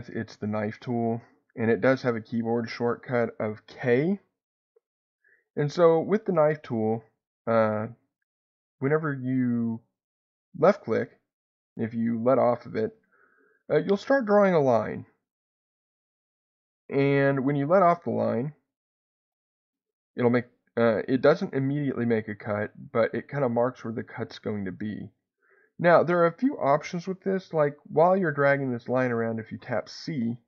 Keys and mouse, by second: 1.2 click, 6.2 click, 10.6-30.4 drag.